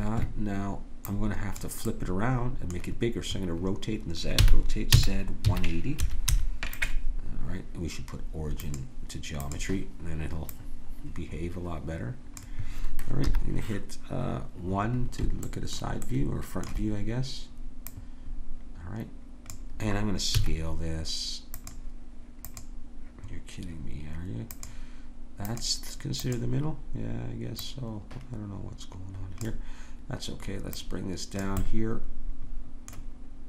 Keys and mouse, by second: 4.4 r, 8.6-12.3 drag, 13.2 KP_1, 14.6-16.4 middle drag, 17.9-20.4 drag, 20.4 s, 22.4-26.4 drag, 31.6 middle click, 32.5-33.4 drag.